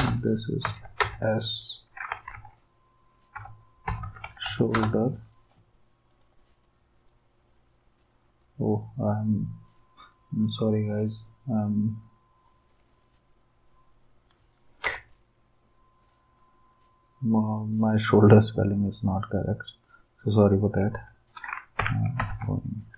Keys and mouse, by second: 0.0 Return, 0.6 s, 1.0 space, 2.3 typing, 3.8-5.0 typing, 14.9 Return, 21.5-22.8 typing.